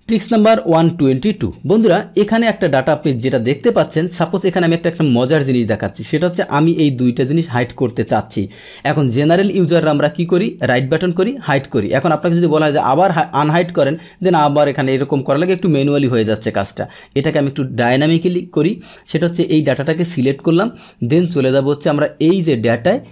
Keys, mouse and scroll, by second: 1.6 click, 6.4-8.3 drag, 10.6 right click, 11.4 click, 12.1 click, 13.8 click, 14.6 right click, 15.4 click, 16.1 click, 18.2-20.4 drag, 22.2 click.